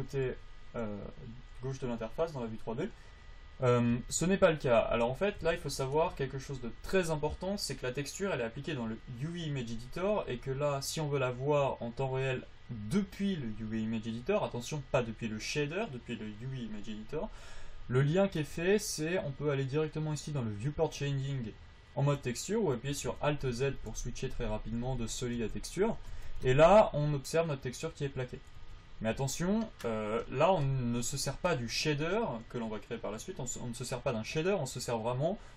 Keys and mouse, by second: 4.2 Tab, 23.4 alt+z, 23.8 alt+z, 24.2 alt+z, 24.6 alt+z, 25.1 alt+z, 26.3 alt+z, 26.6 Tab, 28.9 alt+z, 29.4 alt+z.